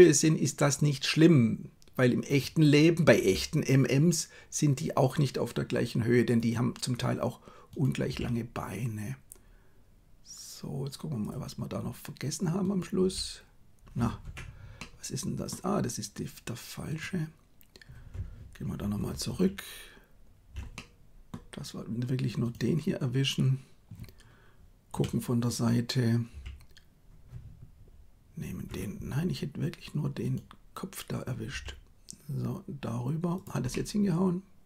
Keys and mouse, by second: 3.2 g, 8.1 g, 13.0 g, 14.7 middle click, 18.7 ctrl+z, 18.9 ctrl+z, 19.2 ctrl+z, 20.6 middle click, 24.9 KP_3, 26.3 g, 31.4 g, 33.6-34.6 middle drag.